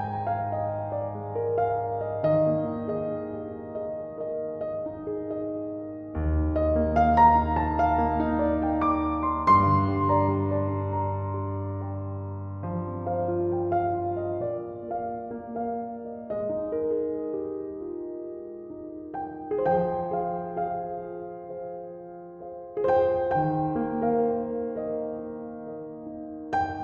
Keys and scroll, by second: 6.8 typing, 18.4-19.2 typing.